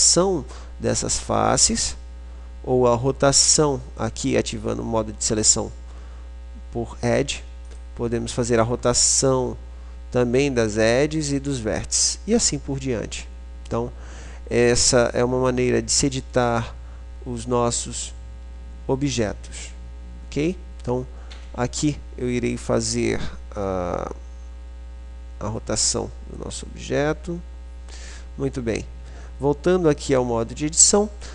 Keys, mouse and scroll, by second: 4.1 right click, 4.6-6.0 middle drag, 7.8-9.6 right drag, 9.6-10.6 drag, 15.3 click, 15.8 middle click, 16.3 click, 16.6-21.5 middle drag, 21.5 Tab, 25.6-26.8 drag, 26.8 right click, 27.5 click, 28.5 Tab.